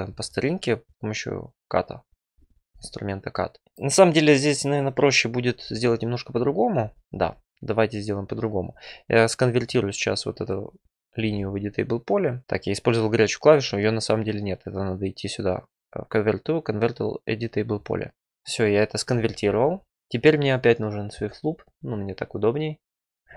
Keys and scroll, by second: 11.1 ctrl+e.